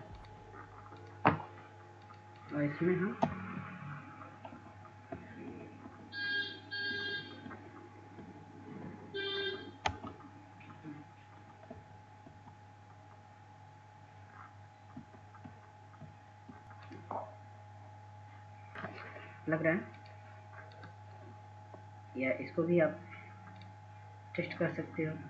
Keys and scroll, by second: 9.2 Down, 9.5 Down, 11.1 Down, 11.5 Down, 11.9 Down, 12.9 Down, 13.5 Down, 14.2 Down, 14.8 Down, 15.4 Down.